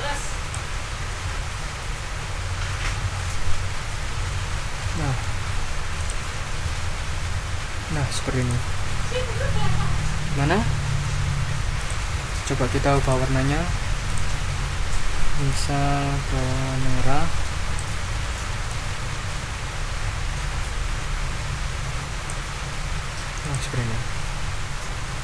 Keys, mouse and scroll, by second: 4.3 ctrl+scroll down 2, 4.9 ctrl+middle click, 6.0 click, 6.9 Left, 8.4 click, 9.3 ctrl+scroll down 2, 11.8 click, 13.0 click, 14.0 click, 15.5-17.9 drag, 18.7-22.5 drag, 23.4 click, 25.1 ctrl+scroll up 2.